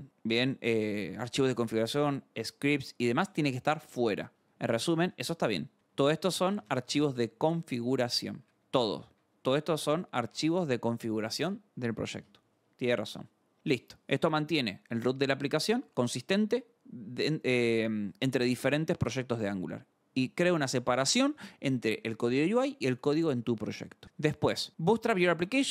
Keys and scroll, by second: 4.3 alt+Tab, 5.1-10.8 typing, 11.8 alt+Tab, 13.6 scroll, 14.8-16.2 scroll, 24.0 scroll.